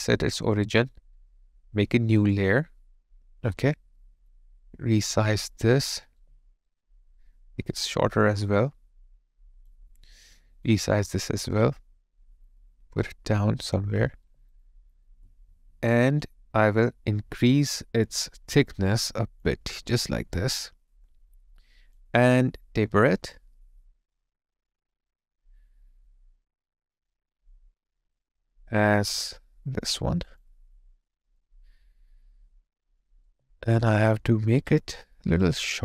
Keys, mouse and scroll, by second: 6.2 alt+right click, 14.6 alt+click, 19.7 alt+right click, 20.1 alt+middle click, 29.1 alt+right click, 29.4 alt+click, 33.3 alt+right click, 33.6 alt+middle click.